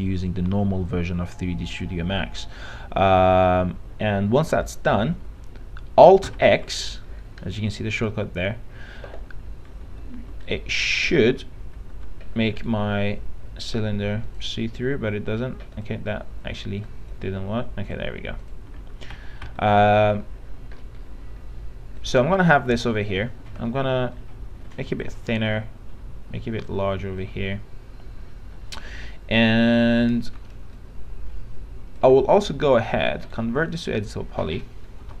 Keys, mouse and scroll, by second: 6.6 alt+x, 10.7 click, 11.4 alt+x, 12.1 alt+x, 12.8-13.8 right drag, 14.4 click, 19.4 alt+x, 19.7 alt+x, 20.0 alt+x, 21.0-22.2 scroll up 1, 22.2 click, 23.4 r, 24.4-27.0 drag, 27.0 w, 27.4-33.2 drag, 33.6 right click, 34.6 click.